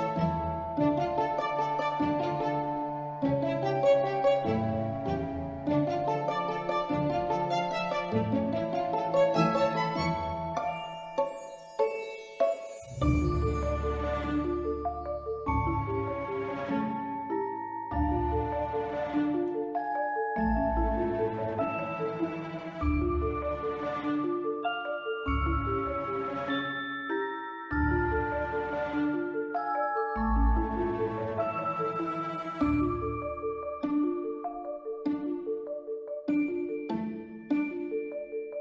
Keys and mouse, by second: 0.4 shift+d, 0.5 shift+Return, 1.4 middle drag, 1.8 ctrl+middle drag, 2.5-3.0 drag, 3.5-4.0 drag, 4.2 drag, 5.8-6.5 drag, 6.9 middle click, 7.4 drag, 7.7-8.0 ctrl+middle drag, 8.6 x, 9.7 click, 10.0 middle click, 10.8 click, 12.2 r, 12.4 z, 13.2 click, 13.5 middle click, 14.5 r, 14.8 y, 17.6 middle drag, 18.6 click, 18.9 middle click, 19.6-20.6 drag, 21.6 r, 21.6 y, 22.1 click, 22.3-22.9 middle drag, 23.2 s, 23.8 click, 24.0-24.4 middle drag, 25.0-26.7 drag, 27.9 click, 28.2-28.5 middle drag, 28.8-29.1 middle drag, 30.9 click, 33.0 click, 33.8 x, 34.6 click, 34.9 s, 35.4 click, 35.8 shift+middle drag, 36.9 click, 37.5-38.2 drag.